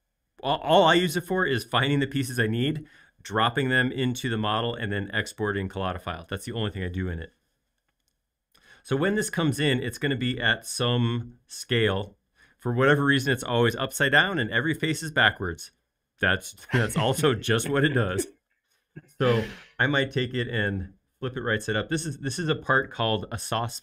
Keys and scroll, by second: 8.1 space.